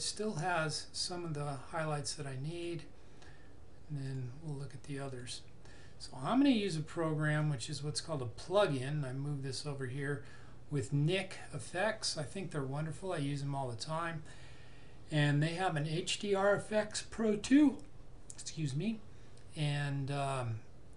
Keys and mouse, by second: 2.6 click.